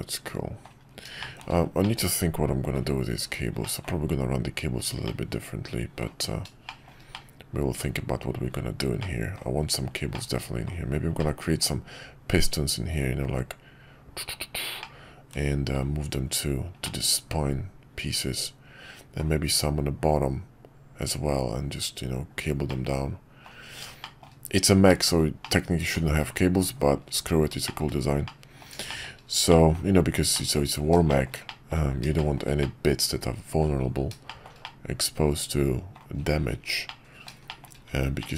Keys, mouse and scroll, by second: 1.2 shift+middle drag, 1.8-2.7 middle drag, 3.6 middle click, 5.0-6.0 middle drag, 6.6 shift+middle drag, 7.1-7.8 middle drag, 9.0-9.3 middle drag, 10.1-10.7 middle drag, 11.2-11.6 middle drag, 14.8-15.7 middle drag, 16.8-19.2 middle drag, 22.7-23.5 middle drag, 24.0 shift+middle drag, 25.4-26.0 middle drag, 26.6 KP_5, 27.6 middle drag, 28.2-28.6 middle drag, 28.9 middle click, 29.5 middle click, 30.3 middle click, 31.1 shift+middle drag, 31.5 middle click, 32.2 shift+middle drag, 32.6-33.6 middle drag, 34.2 shift+middle drag, 34.6-35.9 middle drag, 36.9-37.3 middle drag, 37.5 shift+middle click, 38.2 middle drag.